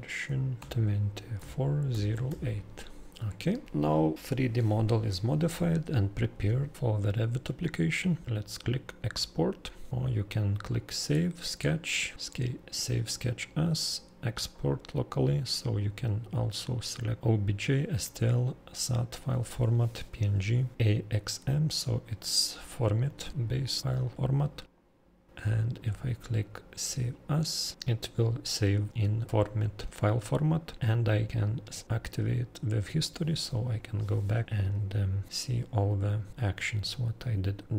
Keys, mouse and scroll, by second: 0.6 2, 1.3 4, 1.9 0, 2.3 8, 3.1 Return, 8.2-9.9 drag, 14.5-16.0 drag, 24.6 click, 25.4 2, 27.7 click.